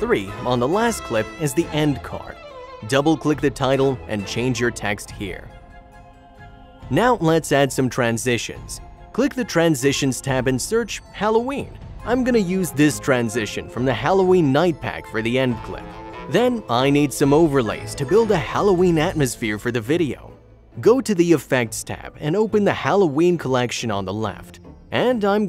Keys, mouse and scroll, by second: 0.5 click, 0.7 click, 1.3 click, 2.0 click, 2.5 double click, 2.8 click, 3.0 double click, 3.8 click, 4.0 double click, 4.4-5.2 typing, 5.2 click, 5.4 click, 6.1 click, 6.2 shift+click, 7.2 click, 15.1 click.